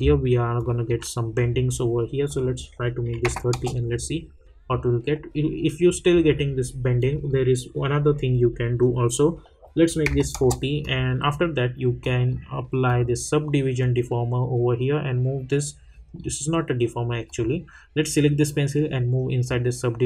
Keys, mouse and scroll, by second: 0.0 alt+scroll up 1, 0.5 alt+click, 3.5 Return, 4.2 scroll down 1, 7.0 click, 10.3 Return, 10.8-20.0 drag.